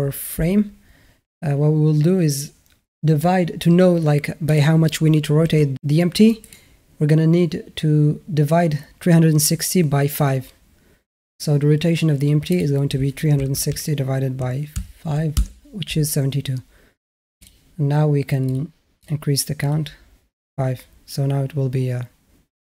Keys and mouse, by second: 4.3 click, 5.3 r, 12.5-15.3 drag, 17.3 drag, 18.3 click.